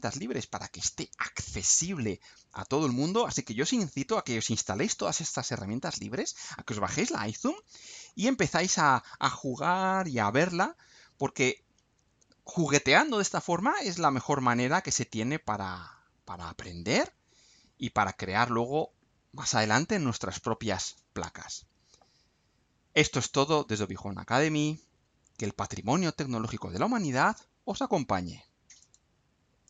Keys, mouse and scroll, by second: 7.5-8.0 scroll down 2, 28.8 click.